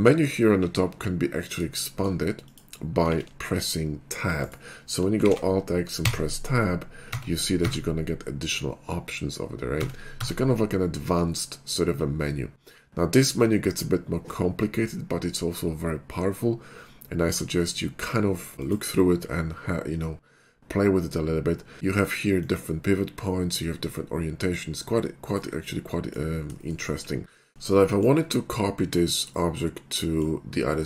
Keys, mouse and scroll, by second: 1.7 shift+middle click, 2.4 click, 3.2 alt+x, 4.4 right click, 5.3 alt+x, 6.0 Tab, 7.1 Tab, 7.7 Tab, 9.8 Tab, 10.2 Tab, 18.6 click, 22.4 click, 25.3 right click, 26.0 middle click, 29.5-30.2 middle drag.